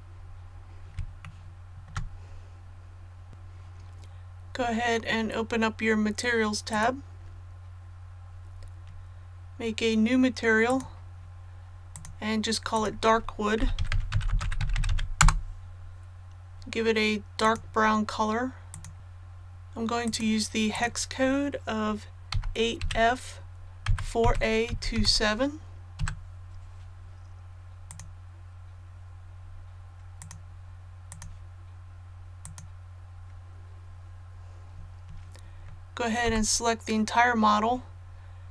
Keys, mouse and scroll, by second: 0.1 scroll down 1, 1.2 shift+middle click, 2.2-2.6 scroll down 1, 3.3 click, 13.5-14.8 typing, 15.1 Return, 17.4 click, 22.2 KP_8, 23.8 KP_4, 24.6 KP_2, 24.9 KP_7, 27.8 click, 29.3-30.1 scroll down 1, 30.1 click, 36.6 a.